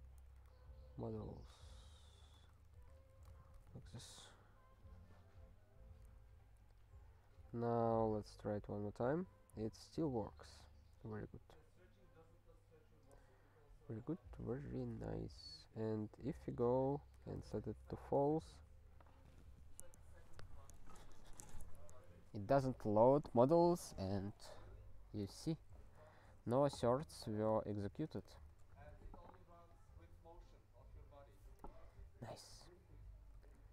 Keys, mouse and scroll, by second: 0.0-3.1 typing, 3.4 alt+^, 3.7 ctrl+s, 9.9 super+b, 11.8-13.3 scroll down 1, 15.8 alt+f, 15.9 alt+f, 16.4 alt+f, 16.6 alt+f, 17.1 BackSpace, 17.3 f, 17.7 ctrl+s, 26.3 super+b, 27.6 ctrl+/, 27.9 ctrl+/, 28.4 ctrl+s, 32.9 scroll down 1.